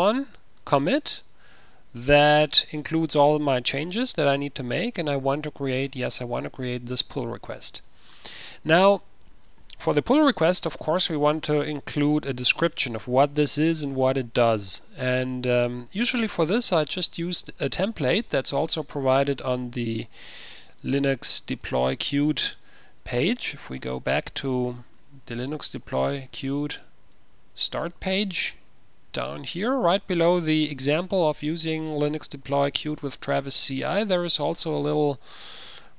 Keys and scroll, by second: 18.3 ctrl+a, 20.4-24.1 typing, 23.2 Tab, 24.3 Return, 27.3-28.2 typing.